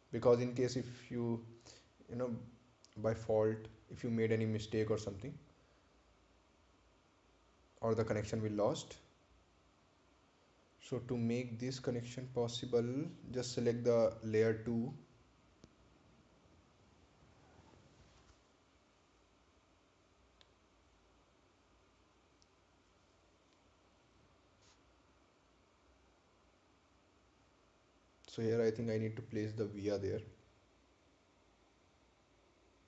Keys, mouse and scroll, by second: 0.4 scroll up 1, 26.7-29.3 drag, 29.3 ctrl+z, 30.4 click.